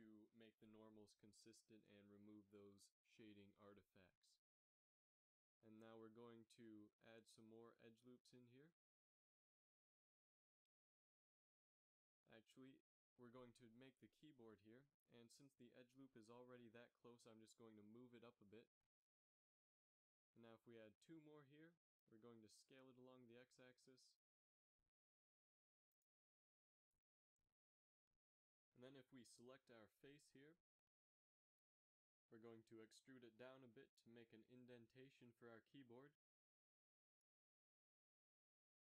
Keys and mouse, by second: 0.5 a, 1.0 middle click, 2.7 KP_7, 3.1 z, 5.4 ctrl+r, 9.1 ctrl+z, 9.8 z, 10.7-11.8 drag, 11.8 z, 12.2 g, 17.2 ctrl+r, 20.5 ctrl+r, 22.6 s, 26.2 z, 26.6 ctrl+Tab, 28.1 click, 31.3 e, 33.9 KP_3, 34.1 z, 35.7 g.